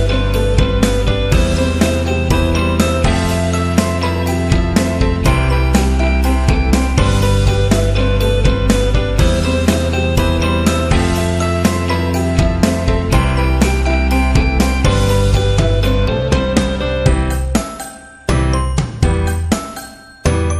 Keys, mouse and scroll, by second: 1.9 click, 2.3-2.8 scroll down 1, 3.1-3.5 scroll down 1, 3.7-5.8 scroll down 5, 6.5-7.0 scroll down 2, 7.7-8.7 scroll down 2, 8.8-9.6 scroll down 2, 10.5-11.1 scroll down 1, 11.6 scroll down 1, 12.3 click, 13.8 click, 14.0 click, 16.1 click, 18.2 click.